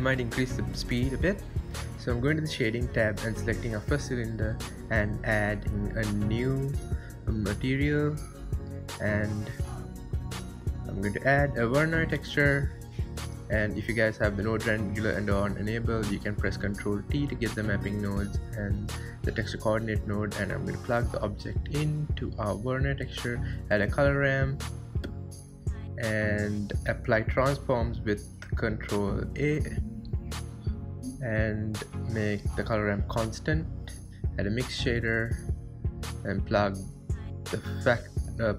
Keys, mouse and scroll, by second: 3.9 click, 4.4 KP_1, 4.8 shift+middle click, 5.2 scroll up 2, 5.5 click, 5.9 scroll down 1, 6.1 scroll up 1, 7.4 click, 10.4 click, 13.2 click, 15.4 click, 16.4 ctrl+shift+click, 17.6 ctrl+t, 18.6-19.4 middle drag, 19.4-20.6 drag, 21.3-21.9 scroll up 5, 25.1 scroll up 1, 26.0-26.4 scroll up 4, 26.4 scroll down 1, 26.6-27.0 scroll up 1, 27.0 click, 27.6 Tab, 27.9 Tab, 29.4 ctrl+a, 30.6 click, 31.2 ctrl+a, 31.8 click, 33.3-37.2 drag, 38.1 click.